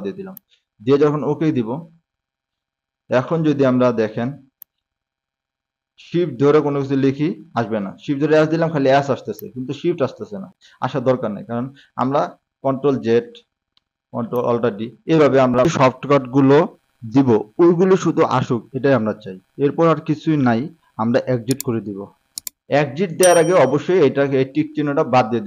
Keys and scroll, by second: 7.6 s, 13.1 ctrl+z, 15.0 alt+d.